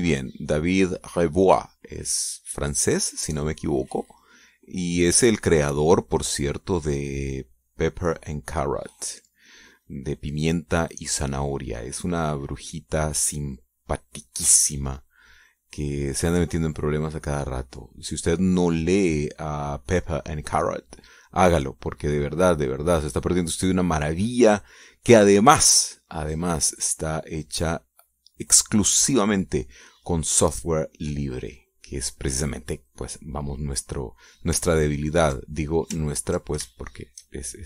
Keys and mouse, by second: 0.6-8.9 drag, 9.2-15.0 drag, 15.4-21.4 drag, 22.5-25.8 drag, 26.1-30.2 drag, 30.6 click, 31.2 middle click, 31.3 click, 31.6 middle click, 33.2-34.8 drag, 35.7 ctrl+click, 36.6 ctrl+click, 37.4 shift+click.